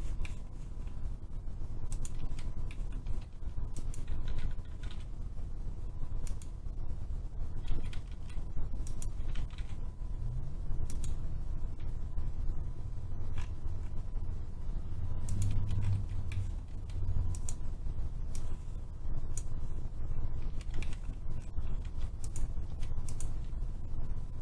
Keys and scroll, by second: 2.1 Escape, 3.0 Escape, 3.2 Escape, 4.0-5.8 typing, 7.6 Escape, 7.8 Escape, 8.0 Escape, 10.5-11.2 typing, 15.4 Escape, 15.8 Escape, 16.7 Escape, 20.3 Escape, 20.6 Escape, 21.7 Escape, 22.6 Escape.